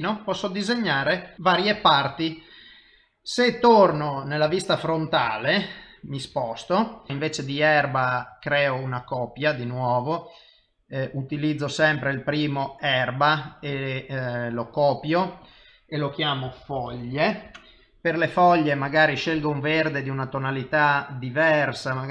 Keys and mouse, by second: 0.5 middle click, 1.7 KP_7, 3.9 KP_1, 4.6 ctrl+middle click, 5.3 shift+middle click, 8.3 click, 9.6 click, 13.7 click, 15.1 click.